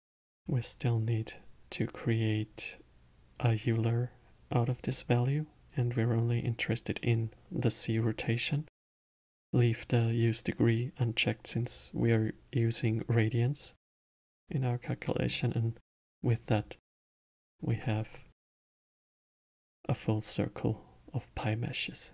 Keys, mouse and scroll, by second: 0.2 shift+a, 5.6 drag, 11.5 click, 12.9-15.1 drag, 15.1-15.9 middle drag, 15.9 scroll down 2, 16.4 scroll up 1, 16.9-18.4 alt+middle drag, 18.4-19.0 scroll up 2, 19.0-22.1 alt+middle drag.